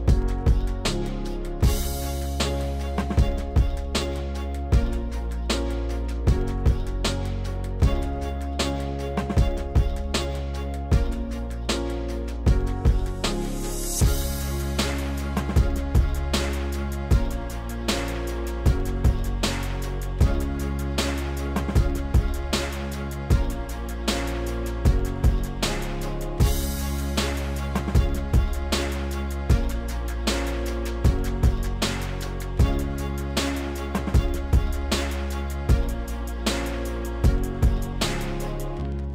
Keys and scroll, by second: 1.3 3, 6.1 3, 13.3 2, 19.1 3, 30.2 s, 34.9 b, 38.7 s.